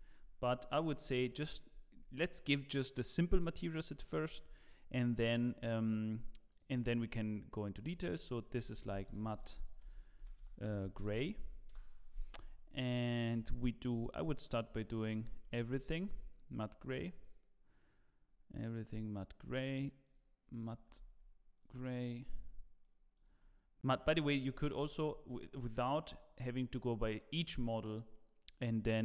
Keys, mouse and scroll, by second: 1.0 scroll up 2, 1.4 shift+middle click, 3.7 scroll up 2, 4.9 click, 6.6 click, 8.8 click, 9.2 t, 12.8 click, 16.6 click, 17.2 click, 19.1 click, 21.7 click, 22.3 click, 25.0 click, 25.0-25.3 scroll down 2, 25.7 shift+middle click.